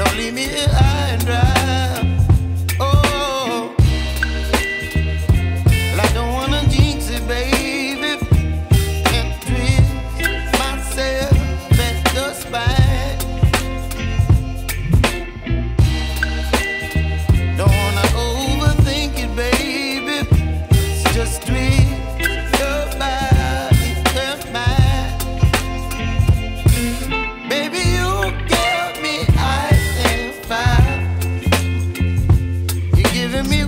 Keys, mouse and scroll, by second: 1.5 Delete, 17.6 ctrl+d, 22.8 double click, 30.0 ctrl+d, 32.2 double click.